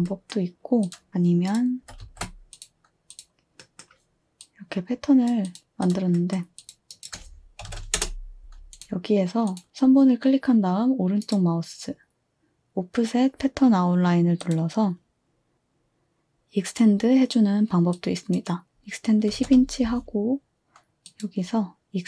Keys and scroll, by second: 1.1 ctrl+z, 1.1 a, 1.8 ctrl+c, 2.0 ctrl+v, 6.8-8.2 typing, 19.1-19.9 typing.